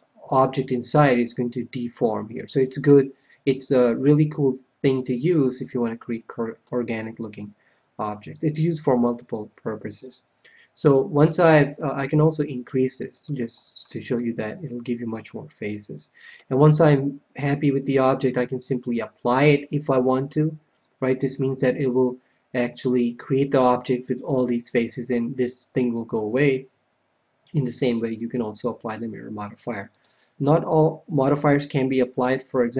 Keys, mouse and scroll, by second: 1.9-3.7 middle drag, 5.5-7.3 middle drag, 9.9-11.8 middle drag, 12.5-14.5 drag, 14.1-15.6 middle drag, 15.9 middle click, 29.8-31.5 drag.